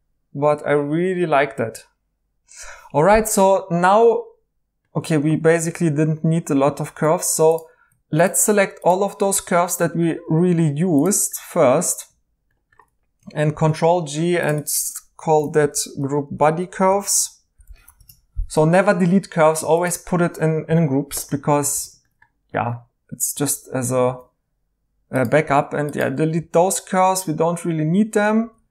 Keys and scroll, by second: 5.6 alt+h, 7.0 2, 13.5 ctrl+g, 15.3-17.1 typing, 17.9 Return, 21.7 e, 24.0 e, 25.5-26.3 typing, 28.4-28.7 typing.